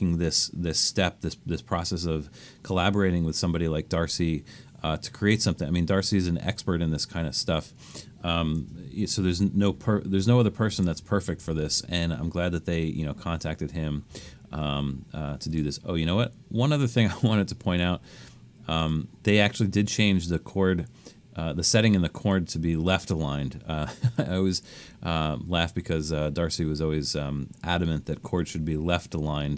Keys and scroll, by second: 8.8 super+=, 9.2 super+=, 9.6 super+=, 10.6 super+=.